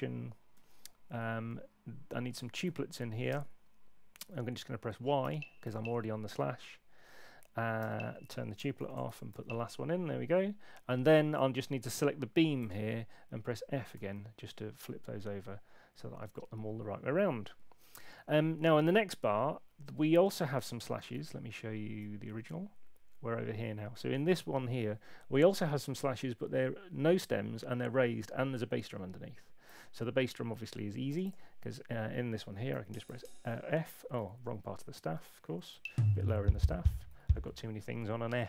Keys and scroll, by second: 0.5 4, 2.1-3.1 typing, 3.3 Return, 5.2 Return, 7.8 y, 8.7 shift+;, 9.3 y, 11.3 y, 13.9 f, 21.1 super+Tab, 32.7 f, 34.4 super+z, 34.6 super+z, 35.8 Down, 36.2 f.